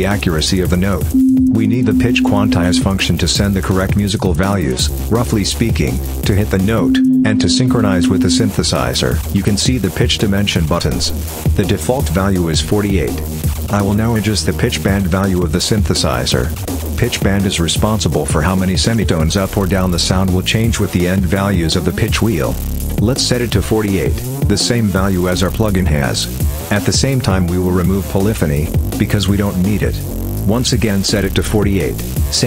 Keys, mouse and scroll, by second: 0.9-2.7 drag, 6.6-8.4 drag, 15.2 click, 17.7-26.4 drag, 26.5 click, 27.9 click, 29.7 click.